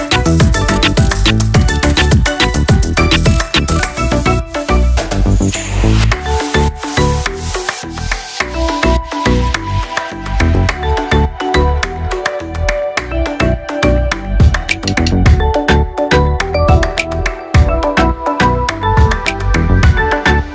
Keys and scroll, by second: 7.4 ctrl+].